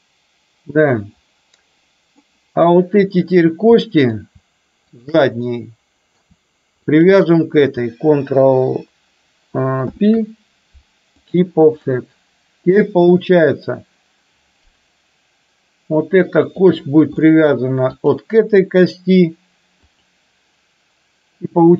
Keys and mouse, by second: 4.0 middle click, 5.0 shift+click, 5.5 middle click, 10.0 ctrl+p, 12.0-13.2 middle drag, 17.3 middle click, 18.1 click.